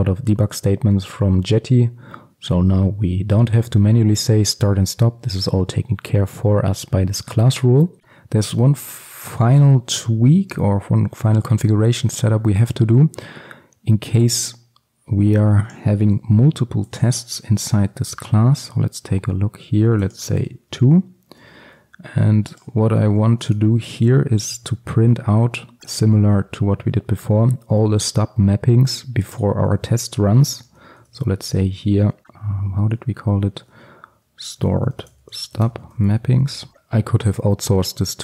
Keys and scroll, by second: 16.1 ctrl+c, 18.0 ctrl+v, 24.7 Return, 37.1 ctrl+c.